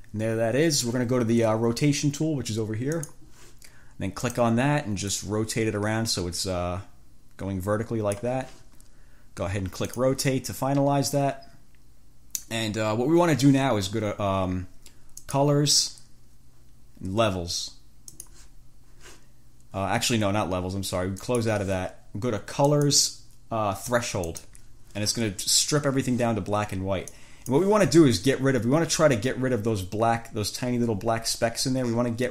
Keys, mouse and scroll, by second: 3.1 click, 4.4 click, 5.4-8.6 drag, 10.0 click, 15.4 click, 18.3 click, 21.4 click, 22.9 click, 24.4 click, 27.4 click, 28.6-29.0 ctrl+shift+scroll up 2.